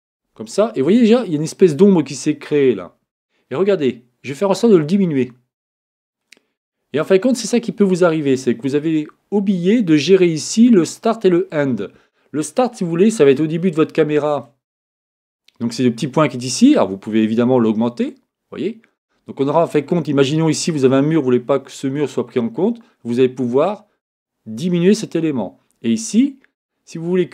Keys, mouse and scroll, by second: 4.6-6.4 drag, 13.4-16.5 middle drag, 17.7-26.9 drag, 26.9-27.3 middle drag.